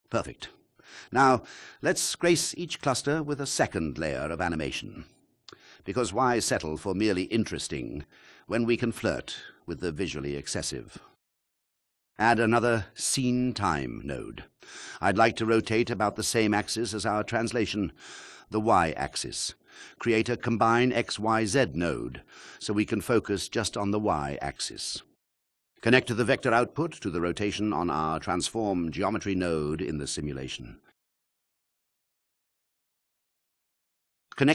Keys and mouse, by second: 2.5 space, 7.8 click, 11.4 shift+click, 13.9 shift+a, 17.1 click, 24.4 shift+a, 27.2 click, 32.4 shift+click.